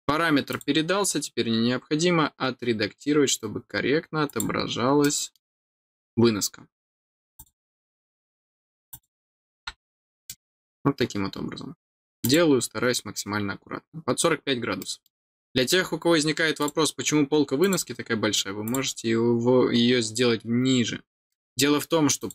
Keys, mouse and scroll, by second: 0.5 click, 4.2 click, 5.0 middle click, 5.7 scroll down 1, 7.3 click, 8.9 click, 10.2 middle click, 12.2 click, 14.2 scroll down 1, 14.7 middle click, 15.6 scroll down 2, 16.0 scroll up 1, 16.6 click, 17.6 click, 18.6 click, 20.3-20.9 scroll down 3, 21.3 middle click, 22.1 click.